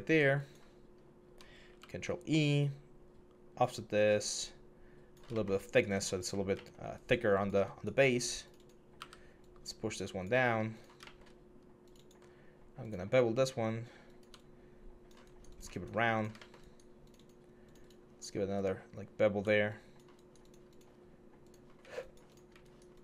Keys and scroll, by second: 1.4 ctrl+e, 8.8 w.